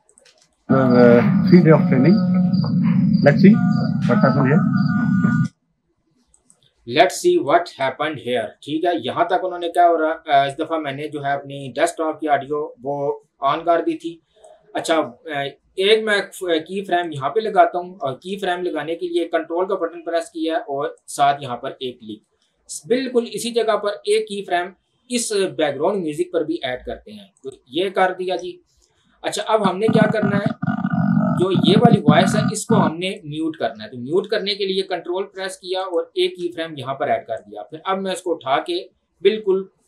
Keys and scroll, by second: 0.3 space, 5.4 space.